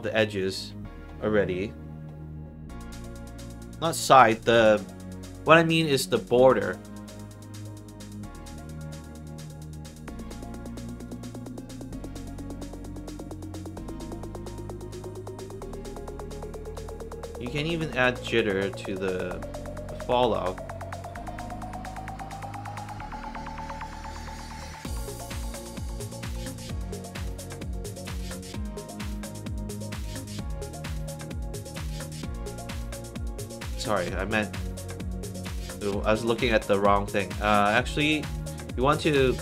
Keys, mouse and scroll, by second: 0.0 alt+middle click, 3.5-4.1 scroll down 2, 10.9 click, 11.1 click, 12.6 scroll down 2, 13.7-14.8 drag, 16.4 click, 18.1 click, 21.4 click, 23.0 click, 24.8 click, 26.2 click, 27.3 click, 28.5-29.8 scroll up 4, 29.8 middle click, 32.0 click, 35.7 click, 36.9 middle click, 36.9 scroll up 2.